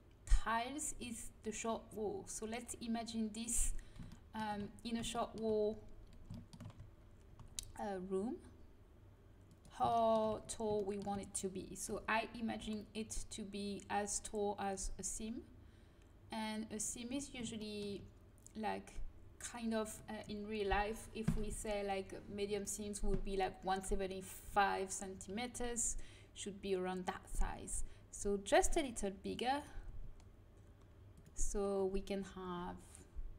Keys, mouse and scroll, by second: 7.2 g, 11.8 g, 28.4 middle click, 28.7-30.4 drag, 30.0 s.